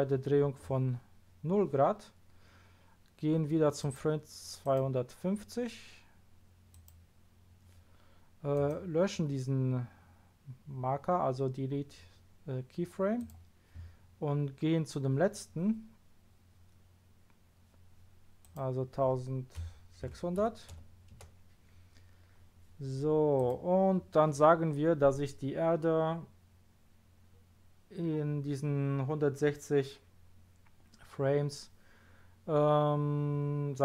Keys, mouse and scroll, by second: 3.8 click, 4.6 click, 6.7 click, 8.5 right click, 18.4 click, 19.6 KP_1, 20.0 KP_6, 20.4 KP_0, 21.1 Return, 23.3 click.